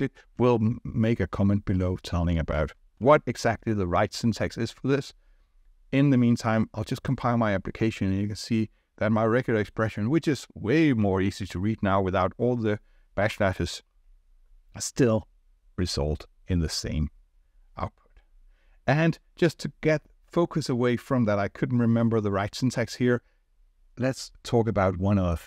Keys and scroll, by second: 3.0 ctrl+r.